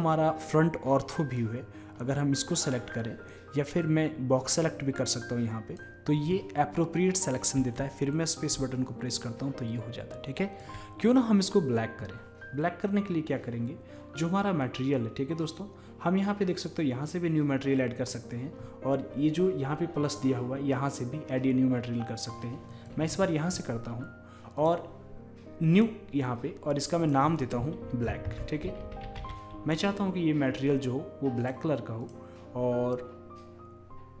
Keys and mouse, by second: 2.0-3.3 right drag, 3.3 middle click, 3.8-7.2 drag, 7.6 space, 8.9-10.7 drag, 22.7-28.9 drag, 32.1-34.0 drag.